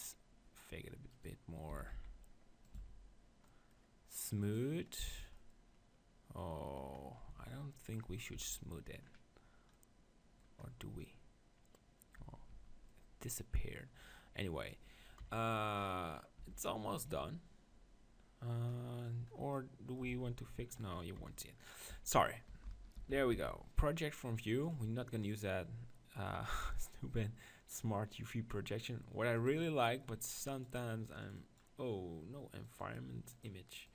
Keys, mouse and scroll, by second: 1.2-2.8 right drag, 1.7 s, 2.8 Tab, 3.1-6.4 drag, 7.3 Tab, 8.3 Tab, 12.2 Tab, 12.5 Tab, 15.2 KP_7, 16.4 Tab, 20.1 Tab, 21.2 KP_7, 21.8-24.7 drag, 21.9 Tab, 23.0 ctrl+l, 23.3 u, 29.5-33.9 drag.